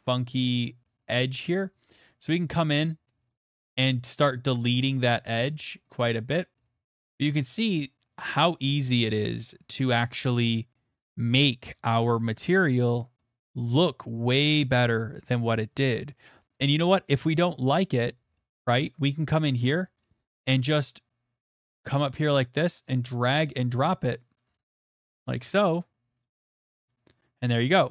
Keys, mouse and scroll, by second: 0.8 click, 1.0 click, 1.3 click, 1.6 click, 1.9 click, 2.2 click, 2.5 click, 2.7 click, 3.0 click, 3.3 click, 3.5 click, 3.6 click, 3.9 click, 4.1 click, 4.4 click, 4.7 click, 5.1 click, 5.3 click, 5.5 click, 5.7 click, 6.5 scroll, 7.4-8.1 scroll, 8.1-8.7 scroll, 8.7 scroll, 9.4-10.3 scroll, 11.8 middle click, 12.6 middle click, 12.8 middle click, 12.8 middle click, 13.5 middle click, 13.7 middle click, 13.7 middle click, 13.8 middle click, 14.4 middle click, 17.4 scroll, 17.4 click, 18.4 middle click, 18.6 scroll, 18.7 middle click, 19.1-20.3 scroll, 20.5 middle click, 22.0 click, 23.8 click, 24.6 click, 26.2 click, 27.6 middle click.